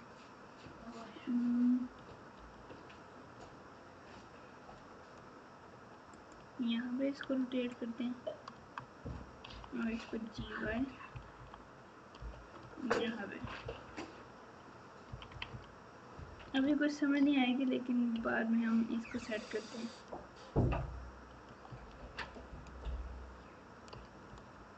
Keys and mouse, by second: 7.2 Tab, 8.5 Tab, 9.4 g, 12.6 Tab, 13.3 KP_6, 13.6 KP_6, 15.0 KP_6, 15.3 KP_6, 15.4 KP_6, 16.6 KP_Subtract, 18.7 Tab, 22.2 click, 23.8 g.